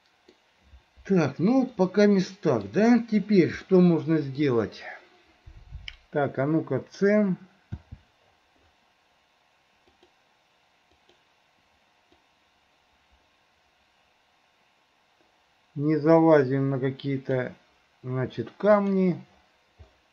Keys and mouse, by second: 1.9 middle click, 3.8 middle click, 4.4 click, 4.4 right click, 7.8 c.